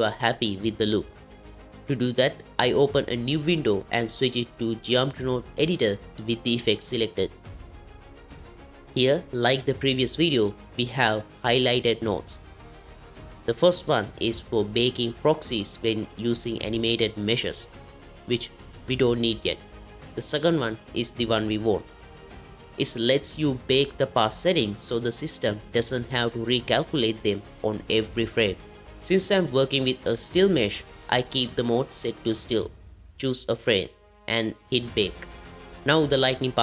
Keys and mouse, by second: 4.3 z, 5.4 click, 7.6-8.2 drag, 8.7 n, 11.9 click, 14.6 ctrl+middle click, 34.4 click.